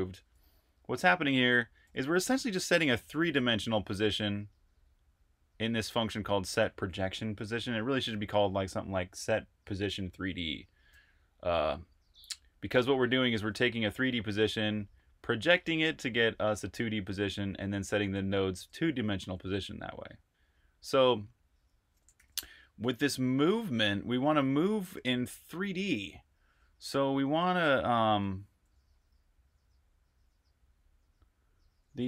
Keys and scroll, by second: 0.1 j, 1.6-4.2 typing, 13.7 Escape, 13.8-15.3 typing, 16.6-19.0 typing, 22.0 super+j, 23.0 super+j, 23.5 super+j, 26.4-28.3 typing, 31.7 typing.